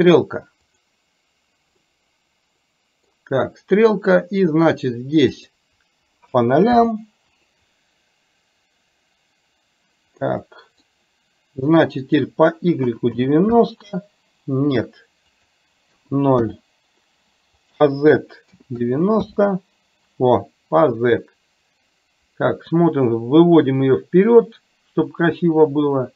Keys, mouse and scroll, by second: 0.9 click, 1.9-3.2 middle drag, 5.4-7.1 drag, 10.4-10.9 middle drag, 12.1-13.8 drag, 15.4-16.7 drag, 17.6-19.4 drag, 22.3-25.3 drag.